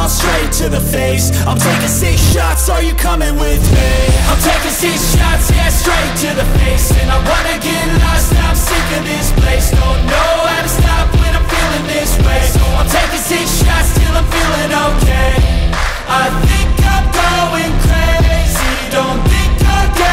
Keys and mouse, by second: 2.7 click, 6.3 click, 8.9 g, 12.3 Escape, 13.8 r, 17.0 Escape, 18.7 s.